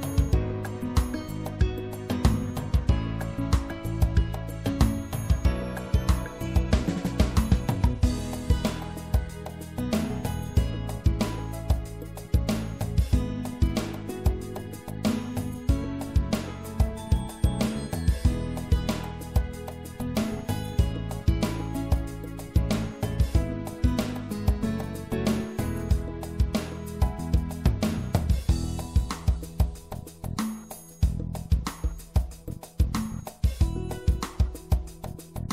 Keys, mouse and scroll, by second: 0.0 right click, 5.5-7.8 middle drag, 9.9-11.6 middle drag, 11.6-13.3 right drag, 14.3 right click, 15.8-18.8 drag, 19.4-24.0 middle drag, 27.1-31.6 middle drag, 31.6-33.3 right drag, 33.3-35.2 middle drag, 35.2-35.5 drag.